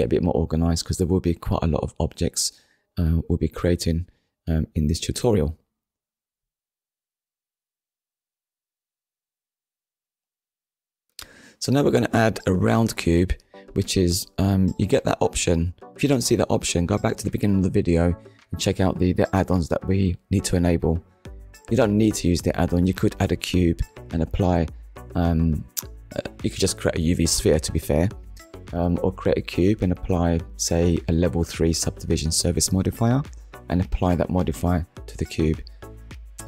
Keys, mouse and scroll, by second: 4.7 shift+middle click, 5.4-5.8 scroll down 2, 5.8 shift+middle click, 6.8-7.1 shift+scroll up 1, 7.5 shift+a, 8.8 click, 13.8 click, 19.8 ctrl+z, 20.8 shift+middle click, 24.7 shift+s, 27.1 click, 28.6 click, 29.4 shift+a, 31.4 click, 33.5 click, 35.5 click.